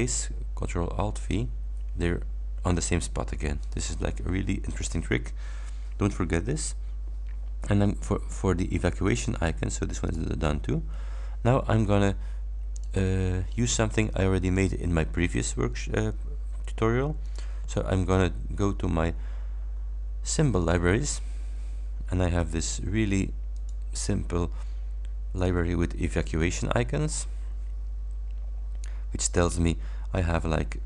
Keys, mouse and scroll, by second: 1.2 click, 3.7 click, 9.2 click, 10.2 click, 12.8 click, 14.6 click, 17.4 click, 20.7 click, 23.6 click, 25.4 click, 29.0-29.6 scroll up 2.